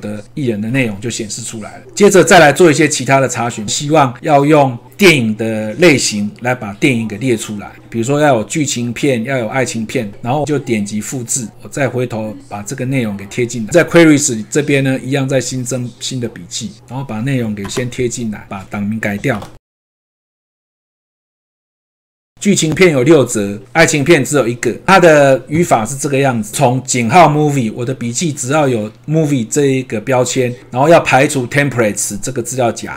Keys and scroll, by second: 17.2 ctrl+v.